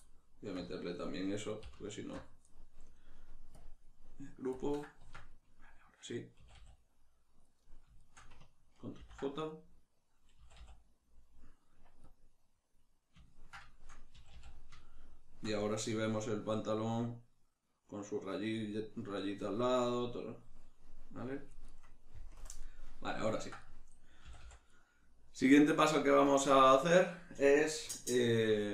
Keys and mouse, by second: 0.0-2.0 middle drag, 2.0 alt+shift+right click, 3.6-5.0 drag, 5.0 Tab, 5.4-7.6 middle drag, 6.4 a, 7.6 right click, 8.0 shift+right click, 8.9 ctrl+j, 9.5-12.1 middle drag, 10.3 a, 12.1-13.3 drag, 13.3-21.7 ctrl+middle drag, 14.1 a, 21.7 right click, 22.4 KP_Decimal, 22.6-28.7 middle drag, 24.3 a.